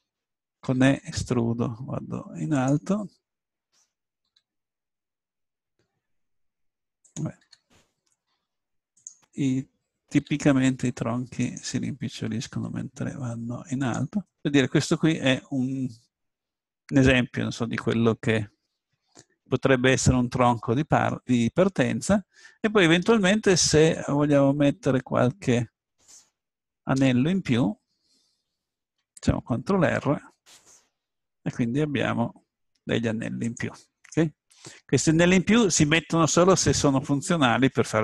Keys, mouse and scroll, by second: 0.6 e, 1.6-2.7 middle drag, 3.0-4.7 drag, 4.3 e, 7.2 click, 7.4 s, 10.2 a, 10.6 click, 11.4-13.3 drag, 12.5 s, 14.0-15.7 drag, 15.7 middle click, 17.2-20.6 middle drag, 25.0 ctrl+r, 29.8 ctrl+r, 34.2-35.6 middle drag.